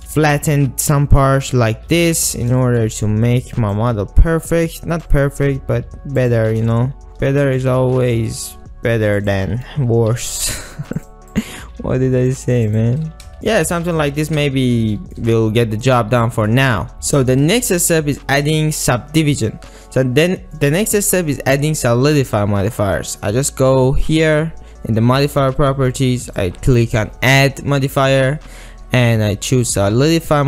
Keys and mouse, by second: 2.1 alt+shift+z, 2.6 shift+middle click, 2.9 middle click, 3.1 alt+z, 5.5 g, 6.6 r, 6.9 shift+middle click, 7.1 alt+shift+z, 7.1 ctrl+click, 7.9 alt+shift+z, 8.4 ctrl+click, 9.2 click, 10.2 g, 10.4 g, 11.1 click, 11.7 g, 11.9 g, 12.4 click, 12.7 click, 13.1 g, 13.3 alt+shift+z, 13.3 ctrl+click, 13.8 shift+click, 14.4 alt+shift+z, 15.0 shift+click, 15.7 click, 16.8 alt+shift+z, 17.0 alt+shift+z, 17.0 Tab, 17.1 shift+middle click, 17.5 ctrl+middle click, 20.0-20.6 middle drag, 20.8-22.2 middle drag, 26.3-29.8 drag.